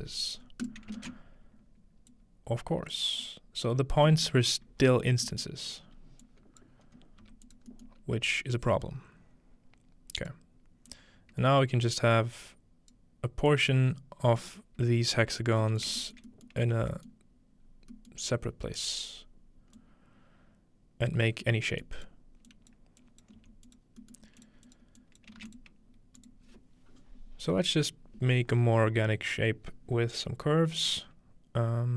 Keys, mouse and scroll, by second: 0.6-3.6 ctrl+drag, 1.0 ctrl+space, 3.8 scroll down 2, 4.0 scroll up 2, 4.3-6.2 middle drag, 4.5 scroll down 2, 5.6 scroll up 2, 6.2-8.3 drag, 6.2-8.3 scroll up 1, 7.2 g, 7.9 middle click, 8.6-10.3 drag, 10.9-13.0 drag, 13.5 click, 16.2 shift+middle click, 16.5 middle click, 17.1 middle click, 17.5-18.8 scroll down 2, 18.1-18.8 middle drag, 18.8 scroll up 4, 19.8-25.6 drag, 21.4 scroll down 2, 21.6 scroll up 2, 23.4 g, 25.4 typing, 26.2 shift+click.